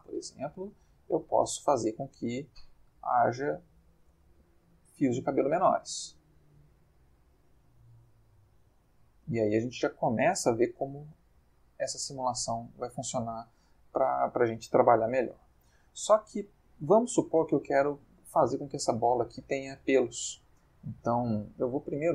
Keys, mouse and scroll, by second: 0.7-3.7 drag, 4.1 space, 10.6-11.3 middle drag, 11.4-12.2 middle drag, 12.3 Escape, 12.9-13.8 middle drag.